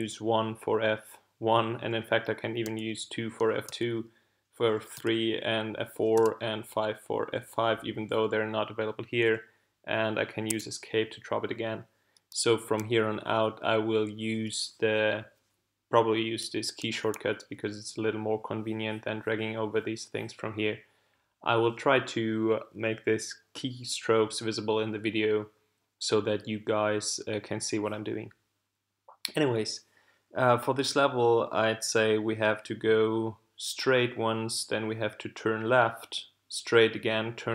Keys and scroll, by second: 2.6 2, 3.7 3, 4.9 4, 6.1 5, 10.5 Escape.